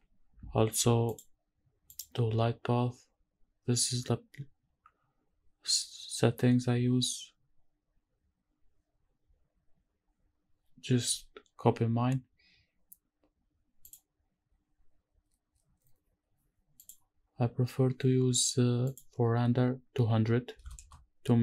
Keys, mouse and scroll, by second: 1.1 click, 1.9 click, 9.0 scroll down 1, 13.8 click, 16.8 click, 17.4-18.9 scroll up 1, 18.9-21.4 drag, 20.8 KP_0.